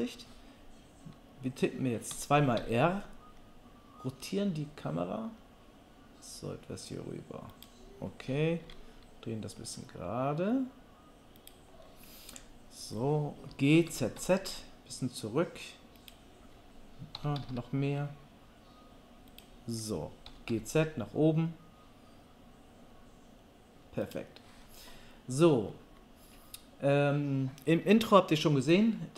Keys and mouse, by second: 2.1 r, 7.6-29.1 middle drag, 8.6 r, 13.5 g, 17.2 g, 20.3 g.